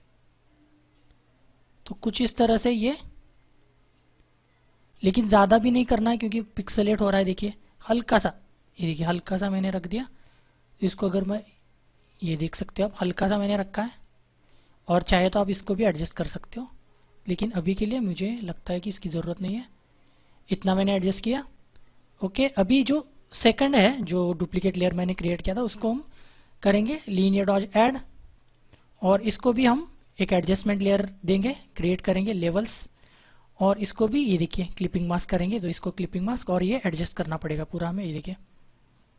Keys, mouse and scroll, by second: 0.0 click, 23.2 click, 28.4 click, 32.3 click, 34.8 click.